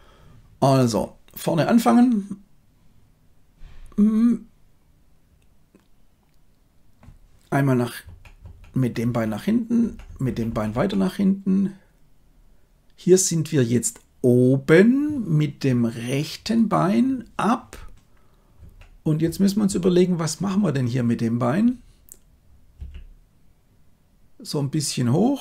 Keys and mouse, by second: 8.0 Right, 8.3 Right, 8.7 Right, 9.0 Right, 9.8 Right, 10.0 Right, 10.2 Right, 10.4 Right, 10.6 Right, 18.5 Right, 19.2 Right, 19.6 Right, 22.7 g.